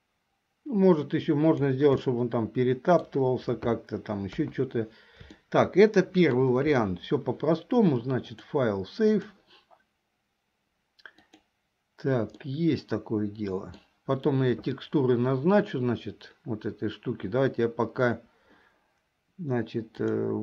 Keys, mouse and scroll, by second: 2.2-3.2 middle drag, 4.4 KP_1, 5.4-6.6 shift+middle drag, 8.3-10.6 drag, 11.4 click, 12.5-14.0 middle drag, 20.0 click.